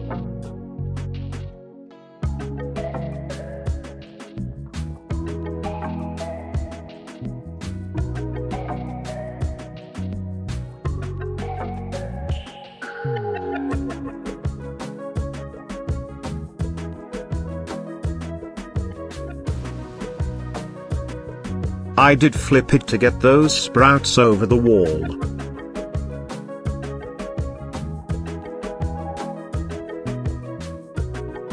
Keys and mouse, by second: 0.1 middle drag, 0.6-0.9 shift+middle drag, 1.7 g, 2.2 x, 3.3 drag, 5.1-5.7 middle drag, 6.2-6.6 shift+middle drag, 7.4 shift+d, 7.7 x, 9.5 click, 9.9 shift+drag, 10.7-11.2 middle drag, 11.4 shift+click, 17.9-21.0 middle drag, 21.5-23.3 drag, 23.9-24.2 middle drag, 24.6 shift+click, 26.5 g, 26.9 x, 27.6 click, 29.8-30.8 shift+drag.